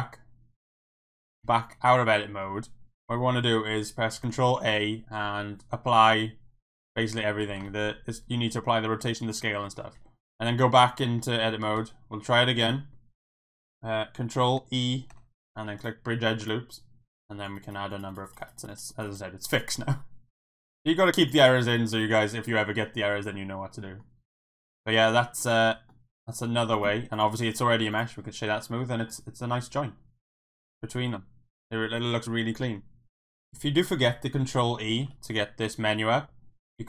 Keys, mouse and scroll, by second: 1.4 Tab, 2.2 middle drag, 4.3 ctrl+a, 7.7 ctrl+a, 9.7 middle click, 9.9 Tab, 11.7 m, 15.1 ctrl+e, 17.4 click, 17.6 click, 17.9 click, 18.1 click, 18.2 click, 18.4 click, 18.5 click, 18.7 click, 18.9 click, 19.5 click, 21.2 click, 21.9 middle click, 22.6-24.0 middle drag, 24.6 middle click, 25.6 Tab, 25.9-26.5 middle drag, 26.7 click, 27.1 click, 27.5 right click, 28.2-28.5 middle drag, 28.6 middle drag, 29.1-32.3 middle drag, 33.2 KP_1, 35.0 ctrl+e.